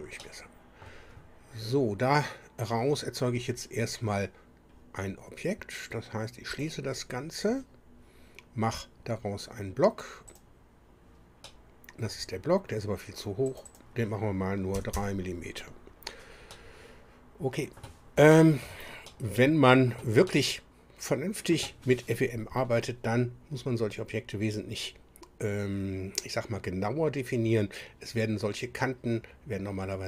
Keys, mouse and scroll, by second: 0.2 middle click, 6.5 click, 10.3 click, 11.4 middle click, 13.5 click, 14.8 KP_3, 14.9 KP_Enter, 16.5-18.0 middle drag, 18.3 shift+click, 19.1-20.1 shift+middle drag, 20.3-21.7 middle drag.